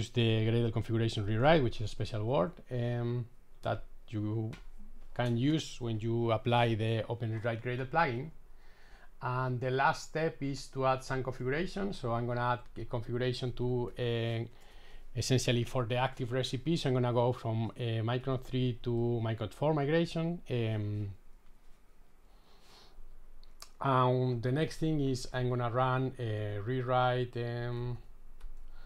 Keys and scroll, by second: 3.6 shift+super+i, 14.1 super+v, 15.0 super+s, 19.8 shift+super+i.